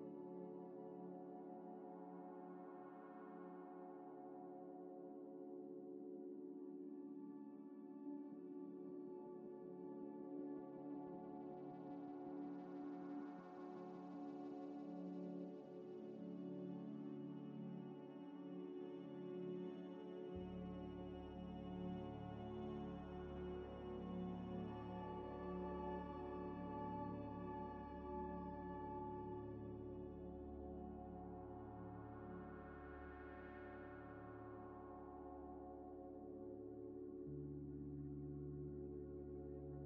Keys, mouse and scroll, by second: 1.4 Tab, 3.1 g, 3.2 x, 3.6 y, 5.3 g, 5.4 x, 5.9 y, 7.2 scroll up 1, 7.5 1, 8.0 ctrl+b, 9.3 p, 10.2 ctrl+z, 10.7 scroll up 1, 11.6 ctrl+b, 15.2 ctrl+c, 15.3 typing, 16.2 scroll down 1, 16.5 scroll up 1, 18.8 ctrl+b, 21.9 ctrl+b, 23.4 ctrl+v, 23.7 Return, 26.1 ctrl+b, 27.5 ctrl+v, 27.8 Return, 28.3 Escape, 28.6 Escape, 28.6 scroll down 1, 28.9 Tab, 29.2 middle click, 29.7 scroll up 1, 29.9 scroll down 1, 30.3 middle click, 30.7 s, 30.9 x, 33.3 scroll up 1, 33.6 middle click, 33.6 middle click, 34.0 g, 34.1 x, 35.0 s, 35.1 x, 36.4 g, 36.4 x, 37.7 shift+click, 38.8 ctrl+-, 39.3 z.